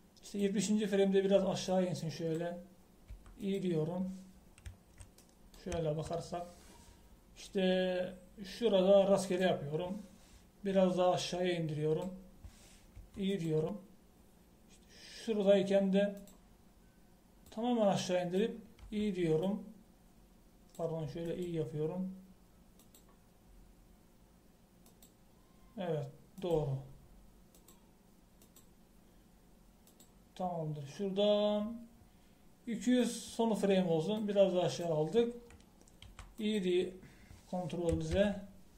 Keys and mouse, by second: 4.1 i, 13.9 i, 19.3 right click, 19.8 i, 37.1 i.